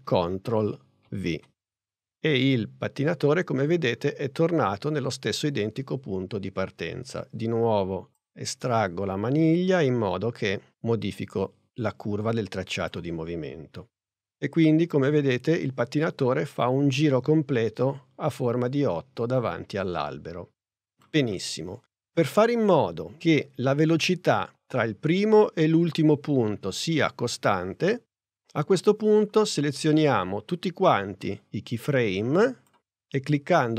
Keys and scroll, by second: 1.1 super+v.